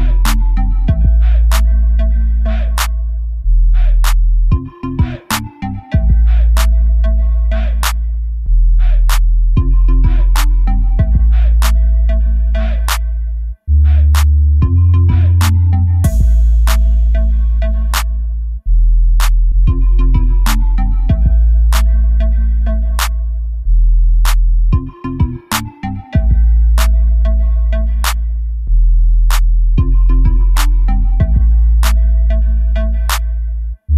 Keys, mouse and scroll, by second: 2.8 click, 3.9 click, 5.5 click, 5.8 click, 10.4 click, 11.3 click, 12.7-14.1 drag, 14.3 middle click, 14.6 click, 14.8 KP_7, 16.8 click, 19.4 click, 22.2 click, 22.6 middle click, 22.9 right click, 28.4 click, 30.5 click, 31.1 KP_0, 33.0-33.9 drag, 33.7 KP_0.